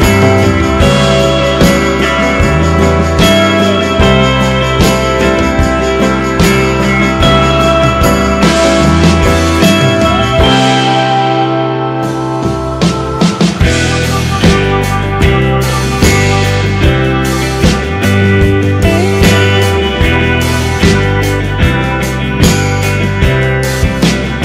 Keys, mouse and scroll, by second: 4.5 g, 16.8-19.0 middle drag.